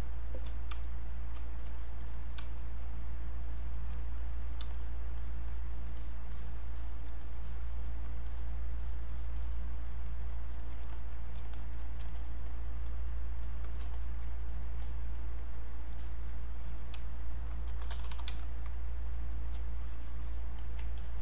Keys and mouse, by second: 1.1 click, 1.3 space, 1.6 click, 2.4 space, 4.2 click, 5.9 click, 7.2 alt+click, 8.3 click, 10.9 alt+click, 11.5 alt+click, 12.1 alt+click, 12.9 click, 15.9 alt+click, 17.0-18.3 typing, 19.5 space, 19.8 click, 20.9 alt+click.